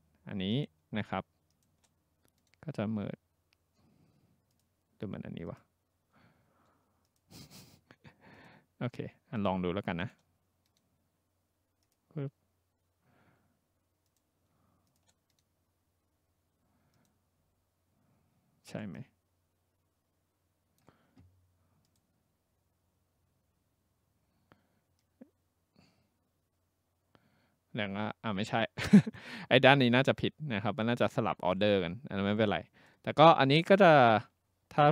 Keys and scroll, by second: 34.7 ctrl+z.